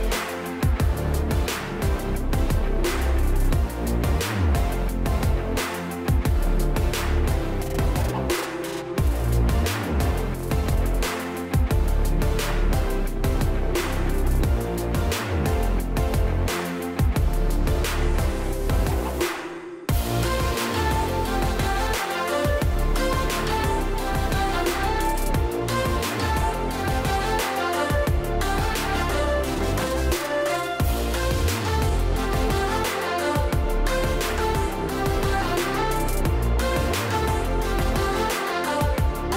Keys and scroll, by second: 2.9 space, 8.3-9.3 space, 26.9 1, 27.6 Return, 28.9 ctrl+space, 29.4 ctrl+space, 32.4 space, 37.7-38.7 space.